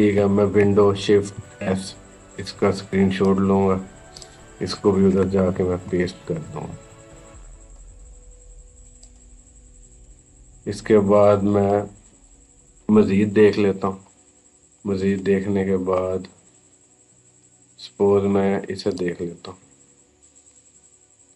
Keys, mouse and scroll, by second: 1.1 shift+super+s, 3.4 click, 5.4 ctrl+v, 6.9-8.7 drag, 10.7 scroll down 1, 12.3 typing, 16.9 scroll up 1, 18.7 click.